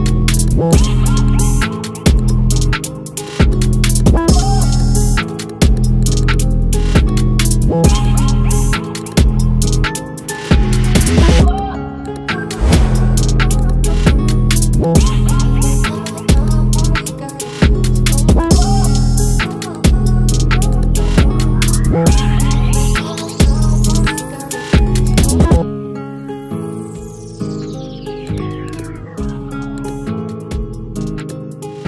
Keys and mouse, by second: 16.3 click, 20.7 click.